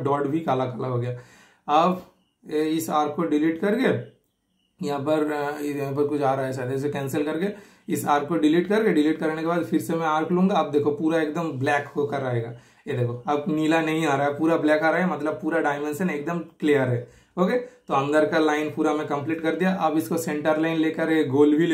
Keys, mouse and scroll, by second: 0.0 super+scroll, 0.4-0.9 super+scroll up 1, 0.9 super+click, 1.6 super+right click, 2.5 super+click, 3.6 super+click, 4.0 super+Delete, 5.2 super+click, 5.8 super+Delete, 6.7 super+click, 7.0 super+Delete, 7.5 super+click, 8.3 super+Delete, 9.3 super+Delete, 9.7 super+middle click, 9.7 typing, 10.4 super+click, 17.0 scroll down 2, 17.2 super+scroll up 1, 17.6 super+middle click, 18.0 typing, 18.5 super+click, 19.1 super+scroll up 1, 19.2 super+scroll down 1, 19.5 typing, 21.2 super+click.